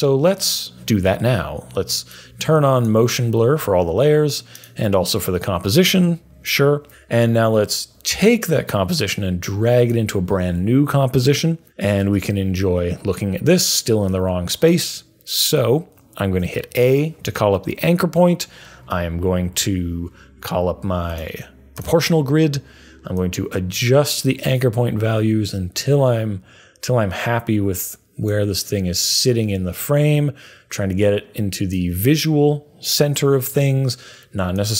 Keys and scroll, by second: 16.5 a.